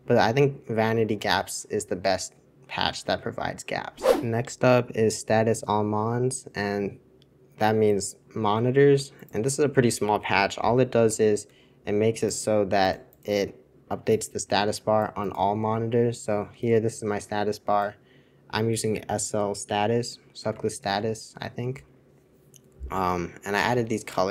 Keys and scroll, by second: 20.6 super+1, 20.8 super+2.